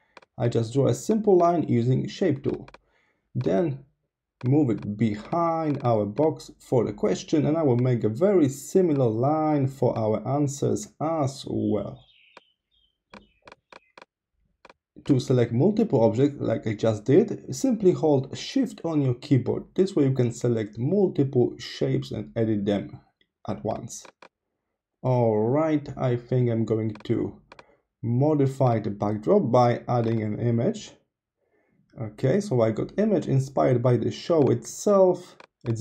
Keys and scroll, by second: 7.1 super+c, 7.2 super+v, 9.3 super+c, 9.4 super+v.